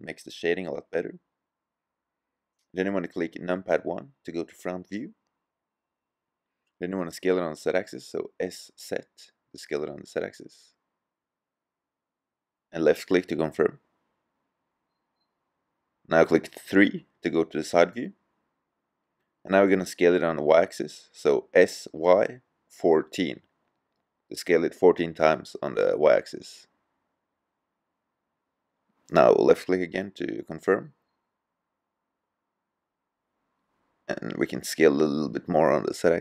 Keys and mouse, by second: 5.0 KP_1, 7.7 s, 15.2-17.1 middle drag, 17.7 KP_3, 21.2 s, 21.5-24.7 middle drag, 24.8-27.8 middle drag, 28.0 click, 29.8-32.4 middle drag, 32.3 s.